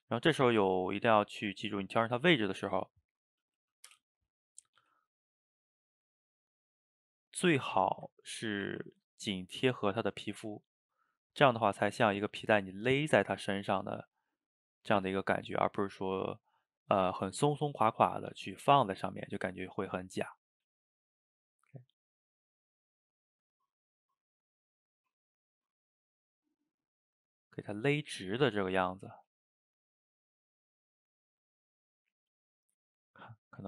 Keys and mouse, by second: 0.0 g, 2.0-3.9 middle drag, 3.9 o, 4.6 click, 4.8 g, 5.9-6.8 middle drag, 6.8 g, 8.0 shift+click, 8.6 ctrl+t, 10.1-11.8 middle drag, 11.8 click, 12.0 g, 13.1 click, 13.3 g, 14.2-14.8 middle drag, 14.8 g, 15.8-16.3 middle drag, 16.3 click, 16.5-18.7 middle drag, 18.7 g, 19.7-20.4 middle drag, 20.4 click, 20.6 g, 21.9-24.6 middle drag, 24.6 click, 24.8 g, 26.4-26.9 middle drag, 26.9 g, 28.3-29.0 middle drag, 29.0 click, 29.2 g, 30.0 middle click, 30.6 click, 30.8 g, 31.6-33.6 middle drag.